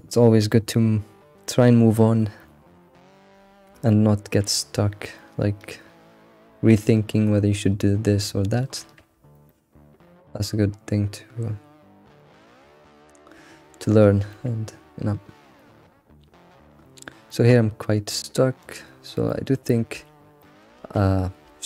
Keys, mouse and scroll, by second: 3.3-3.9 scroll down 3, 3.9-7.0 shift+middle drag, 9.1-9.5 scroll down 1, 9.5-12.5 shift+middle drag, 14.4-15.9 middle drag, 15.9-16.5 scroll down 4, 16.9-17.3 scroll up 3, 17.3-19.0 middle drag, 19.0-20.0 scroll up 5, 19.3 shift+middle click, 20.0 Tab, 20.4 middle click, 20.7 alt+x, 21.4 alt+x.